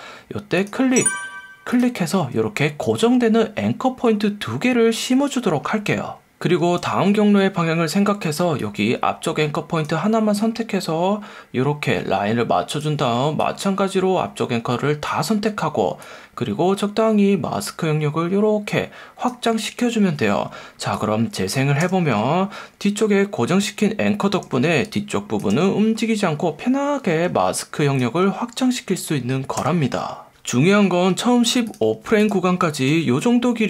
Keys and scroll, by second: 32.9 F1.